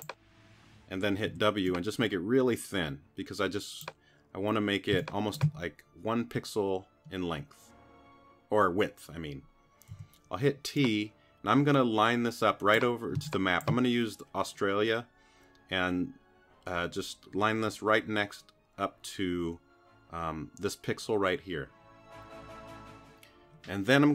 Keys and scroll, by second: 1.3 w, 4.9 space, 9.9 t, 13.2 space.